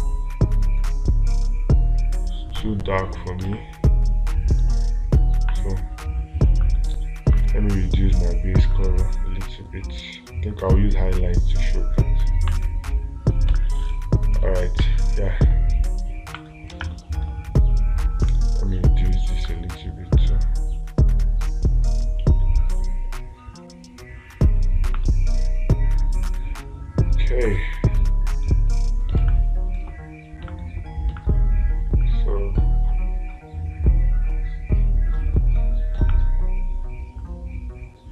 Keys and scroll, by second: 3.9 space, 17.2 space, 29.6 space.